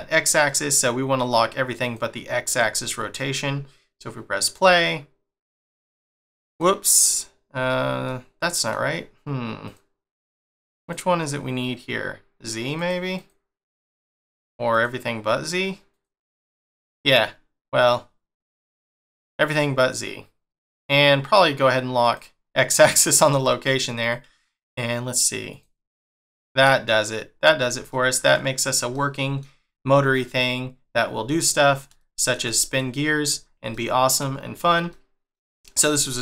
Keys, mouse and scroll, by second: 0.4 middle click, 1.7 click, 2.4 click, 4.4 click, 6.5 click, 7.0 click, 8.0 middle click, 9.6 click, 10.1 click, 10.7 click, 12.7 click, 13.1 click, 14.2 click, 14.6 click, 15.8 click, 22.0 click, 24.0 click, 24.6 click, 25.4 click, 26.8 middle click, 31.6 scroll down 2, 32.0 shift+middle click, 34.4 scroll down 1, 34.9 shift+middle click.